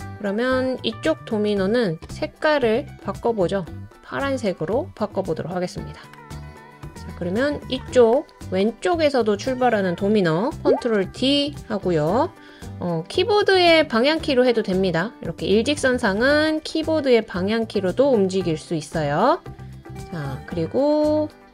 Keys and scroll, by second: 10.8 super+d, 12.5-13.4 Down, 13.8-14.7 Left, 17.2 Right.